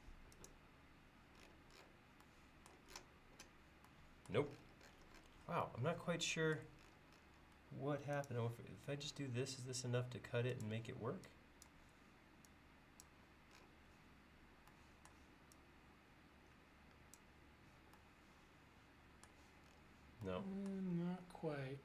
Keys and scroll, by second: 7.6 l, 10.9 e.